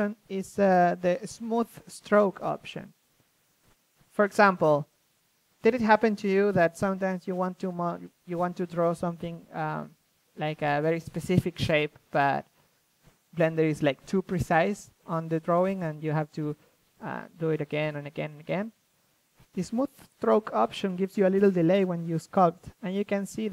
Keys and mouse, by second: 14.4 ctrl+z, 15.2-17.9 drag, 21.6-22.7 drag.